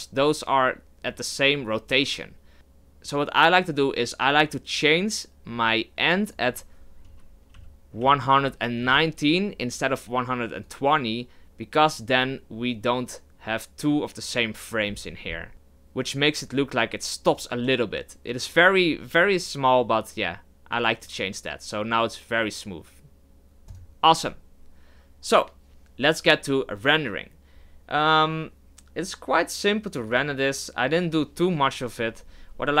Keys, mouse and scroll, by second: 17.3 click, 23.7-31.5 drag, 31.6-32.8 middle drag.